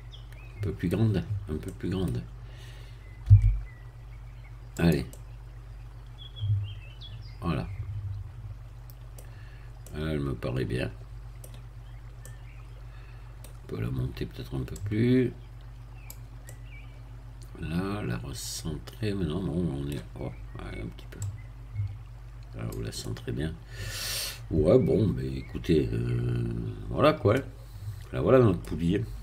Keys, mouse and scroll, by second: 1.2-1.6 scroll up 2, 1.6 middle click, 3.2 s, 4.7 click, 5.1-9.3 middle drag, 9.3-9.7 scroll down 2, 9.8-11.7 middle drag, 11.7 scroll up 1, 12.2-13.6 middle drag, 14.7-16.4 drag, 16.4-20.6 middle drag, 21.2-22.8 drag, 23.0-29.1 middle drag.